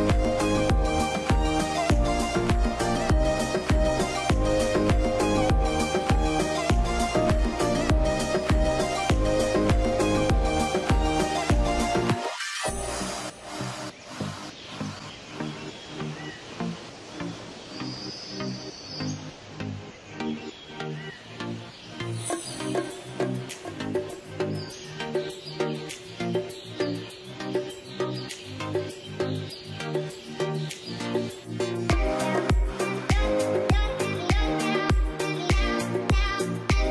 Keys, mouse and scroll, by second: 9.6 z, 10.0-10.3 scroll up 1, 10.3 middle click, 13.2 scroll up 1, 13.9 middle click, 18.3 middle click, 18.4 scroll down 1, 18.7 middle click, 20.7 scroll up 1, 21.2 ctrl+click, 21.6-22.0 scroll down 1, 22.0 middle click, 22.2-23.9 scroll down 1, 24.2-25.8 scroll up 1, 27.4 alt+middle click, 27.4 scroll down 1, 27.7 middle click, 27.9 scroll up 1, 28.3 middle click, 29.1 scroll up 1, 30.3 scroll down 1, 30.5 scroll up 1, 30.7 t, 31.3-32.2 scroll, 32.2-34.4 scroll up 1, 34.7-35.2 scroll up 1, 35.8 scroll down 1, 36.0 middle click, 36.4-36.9 scroll down 1.